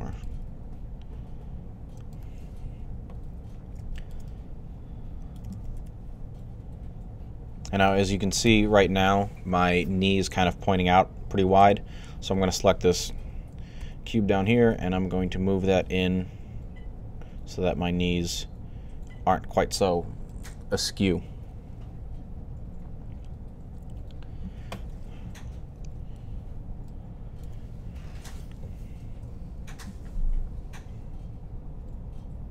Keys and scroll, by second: 0.1 g, 5.6 1, 13.6 g, 25.6 3.